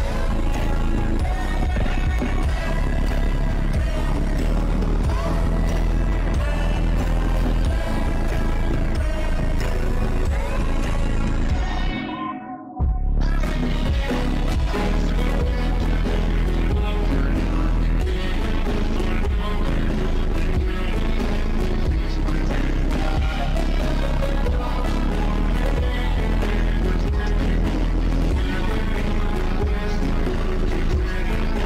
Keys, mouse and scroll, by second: 0.3 click, 1.3 shift+`, 2.4 click, 2.6 shift+`, 3.0 click, 3.9-5.4 drag, 5.4 shift+`, 6.3 click, 7.4 shift+`, 9.8 ctrl+c, 9.9 ctrl+v, 10.1 click, 10.5 click, 11.0 ctrl+z, 11.1 ctrl+z, 11.3 ctrl+z, 11.8-13.0 drag, 13.4 shift+`, 14.3 click, 14.9 click, 15.9 shift+`, 16.6 click, 17.4 ctrl+z, 17.5 click, 18.1 ctrl+z, 18.5 shift+`, 19.1 click, 20.1 click, 20.8 click, 21.3 click, 22.4 shift+`, 23.0 click, 23.7 click, 24.2 click, 25.0 click, 25.7-27.4 drag, 27.4 shift+`, 28.9 click, 29.1 click, 29.5 ctrl+c, 29.6 ctrl+v, 29.9-30.2 drag, 30.6 click, 31.2-31.6 drag.